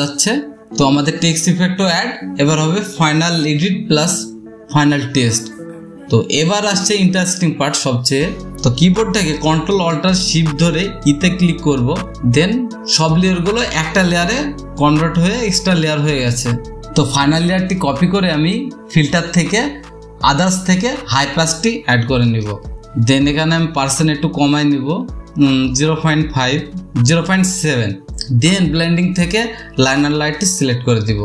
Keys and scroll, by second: 12.3 ctrl+alt+shift+e, 23.5 space.